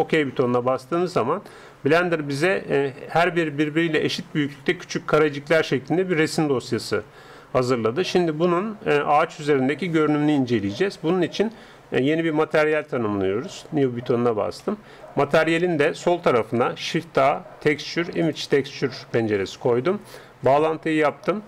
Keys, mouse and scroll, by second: 11.9-13.9 drag, 13.9-16.7 middle drag, 16.7 shift+a, 20.5-21.4 drag.